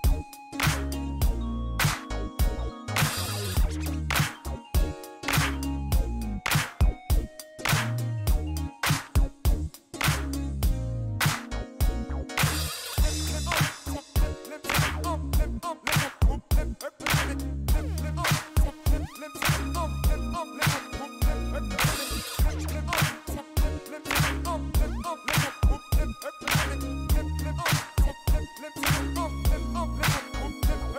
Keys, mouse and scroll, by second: 0.5 click, 2.0 click, 3.2 KP_2, 3.5 KP_Enter, 5.3-6.4 drag, 7.5 click, 7.9 middle click, 9.6 click, 11.2 click, 13.8 KP_8, 14.0 KP_Enter, 15.9-18.2 drag, 18.3 middle click, 19.3 click, 21.1 middle click, 22.9 click, 24.0 KP_4, 24.2 KP_Enter, 27.5-28.6 drag, 30.2-30.9 drag.